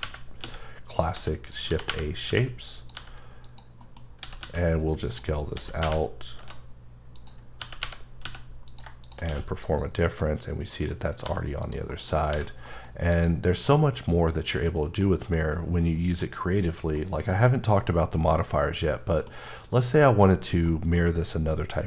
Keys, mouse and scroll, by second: 0.0-2.9 typing, 0.9 click, 1.5 click, 2.8 click, 3.5 click, 3.8 middle click, 4.0 scroll down 1, 4.4 x, 5.6 s, 6.4 x, 7.1 click, 7.6 g, 8.2 x, 8.7 click, 9.3 q, 9.6 click, 10.2 middle click, 10.4 scroll down 1, 11.1 scroll up 1, 11.2 g, 11.6 click, 11.9 middle click, 12.3 h, 12.7 middle click, 13.1 click, 13.5 scroll, 13.7 middle click, 17.3 middle click, 18.7 middle click.